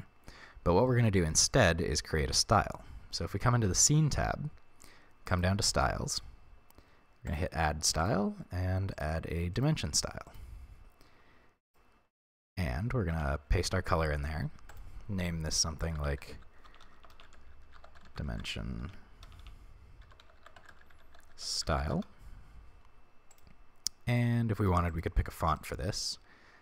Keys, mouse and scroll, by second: 0.9-3.8 middle drag, 3.8 click, 5.3 click, 6.1-7.3 scroll down 1, 7.3-11.7 drag, 10.8-11.7 scroll down 1, 12.1-13.2 scroll down 1, 13.2 ctrl+v, 14.7-23.4 drag, 16.8 BackSpace, 24.1 click, 24.6 click, 24.9 click, 25.7 right click.